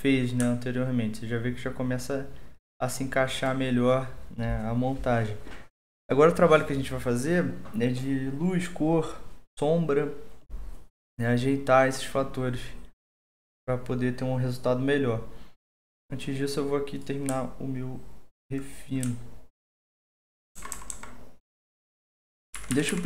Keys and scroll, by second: 20.6 typing, 22.3-23.0 typing.